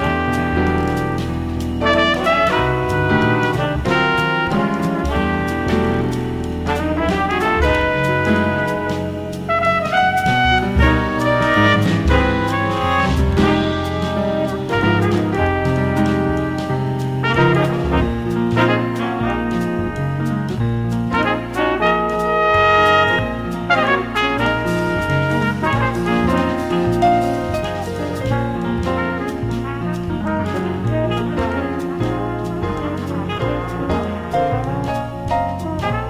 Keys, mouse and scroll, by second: 2.4 a, 3.9 space, 7.1 a, 8.7 a, 11.9-13.7 drag, 14.1 b, 17.1 middle click, 17.8 middle click, 18.5-21.0 drag, 23.2 ctrl+click, 23.2 b, 25.7 b, 27.7 b, 31.2 space, 35.5 x.